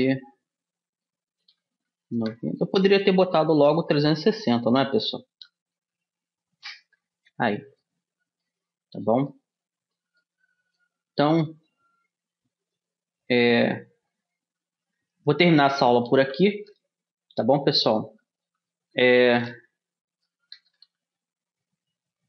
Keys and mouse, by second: 4.2 r, 8.4 middle click, 9.2-10.8 middle drag, 11.2-12.2 middle drag, 12.2-14.0 drag, 14.1 Tab, 15.4 BackSpace, 15.6 BackSpace, 16.8-21.6 typing.